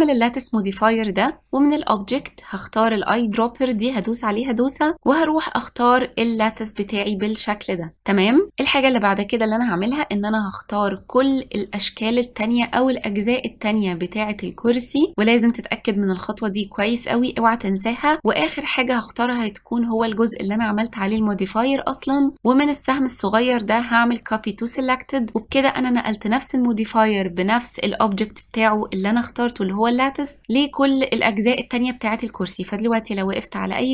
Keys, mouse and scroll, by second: 2.2 click, 10.0 click, 11.3 shift+click, 12.2 shift+click, 12.7 shift+click, 13.3 shift+click, 13.8 shift+drag, 14.5 shift+drag, 20.1 shift+click, 23.0-25.7 drag, 32.4 click, 33.4 click.